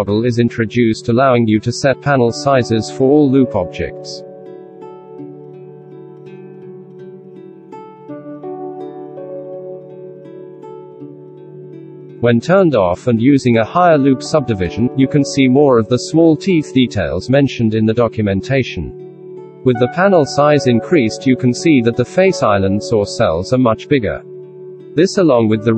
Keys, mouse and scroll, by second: 10.9 F9.